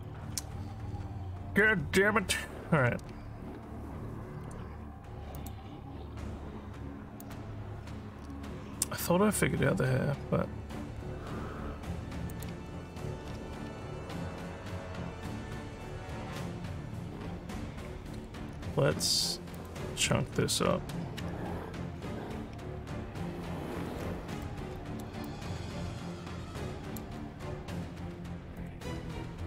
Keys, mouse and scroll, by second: 5.3 click, 7.2 click, 8.2 scroll down 2, 9.5 scroll down 1, 9.5 scroll up 2, 12.3 click, 18.5 scroll up 3, 19.5 click, 24.5 alt+middle click, 25.2-26.9 alt+drag, 28.6 click.